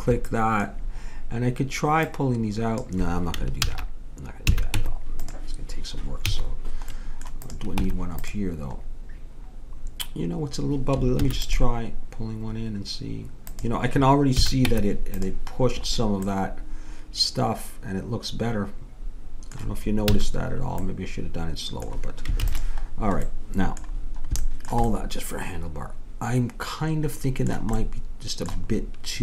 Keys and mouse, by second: 2.8 click, 3.6 ctrl+z, 4.5 a, 4.7 Tab, 6.2 a, 7.8 Tab, 11.2 ctrl+r, 14.3 a, 14.7 Tab, 20.1 a, 22.4 ctrl+s, 27.8-29.2 middle drag.